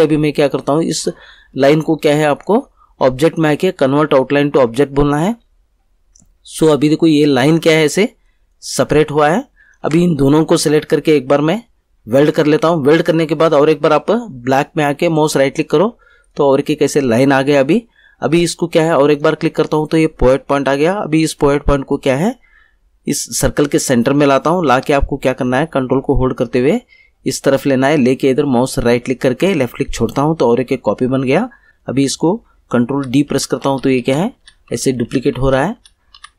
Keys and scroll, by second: 9.8 ctrl+z, 32.9 ctrl+d.